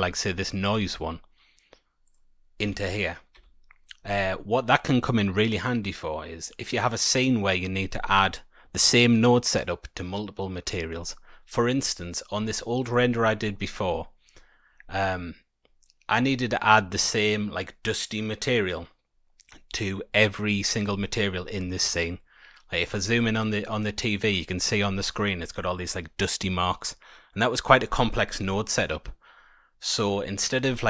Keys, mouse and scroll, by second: 2.0 click, 2.6 Delete, 3.3 Tab.